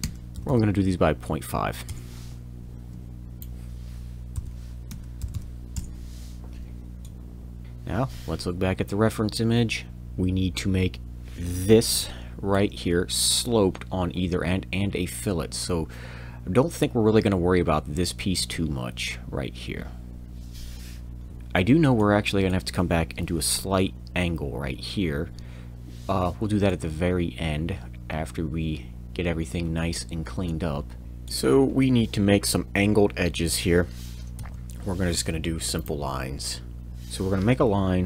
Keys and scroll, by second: 0.3 m, 3.4 f, 4.9 5, 5.2 m, 34.3 l, 34.4 l, 36.8 ctrl+z, 36.8 Tab, 36.8 5, 36.8 1, 37.6 z, 37.7 l.